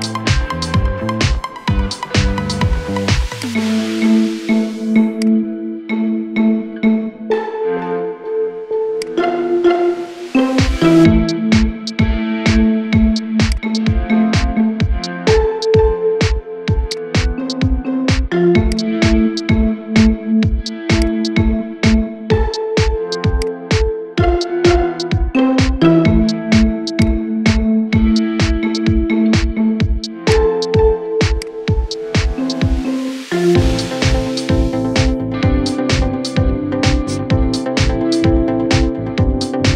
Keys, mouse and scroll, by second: 0.0-0.4 scroll up 3, 0.4 shift+middle click, 0.7 scroll up 4, 1.0-2.1 shift+middle drag, 2.1 r, 3.7-4.5 shift+middle drag, 4.5 g, 5.5-5.9 shift+middle drag, 5.9 scroll down 3, 7.0 shift+d, 9.0 scroll up 2, 9.3-10.9 shift+middle drag, 10.9 shift+d, 14.0 shift+d, 17.4 shift+d, 18.7 scroll down 2, 19.0-19.9 shift+middle drag, 19.9 r, 21.1-22.0 scroll up 2, 22.0 g, 23.9 shift+d, 27.5 shift+d, 30.4 scroll down 2, 31.2 click, 31.5-31.8 scroll down 2, 31.8-32.4 middle drag, 32.4 scroll up 1, 32.7-35.1 shift+middle drag, 35.1 scroll down 3, 36.0-37.9 middle drag, 37.9 scroll up 1, 38.4-39.7 shift+middle drag.